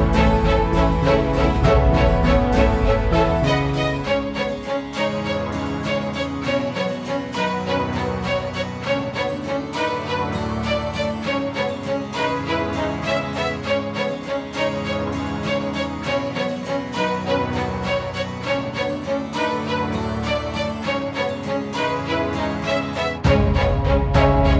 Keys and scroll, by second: 5.4 ctrl+alt+shift+e.